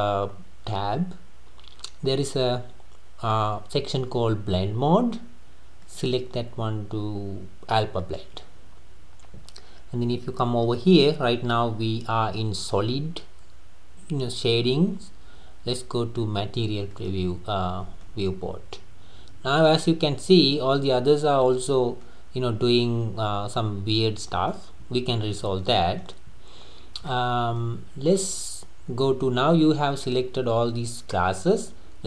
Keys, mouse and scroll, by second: 5.8-8.9 drag, 17.1 click, 18.0-21.0 middle drag, 22.1-25.1 middle drag, 25.3-25.7 scroll down 2, 25.7-26.8 middle drag, 26.8-27.1 scroll up 1, 27.1-30.1 middle drag.